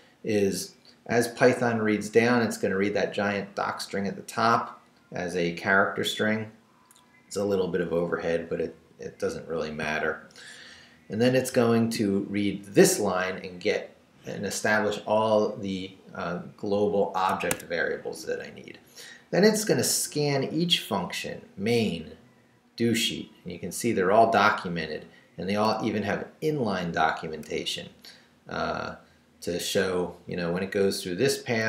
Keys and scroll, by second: 11.4 shift+v, 17.4 Escape, 18.0 Down, 20.2 Down, 21.8 Down, 24.7 Down, 25.7 Up, 29.4 Up, 31.4 Down.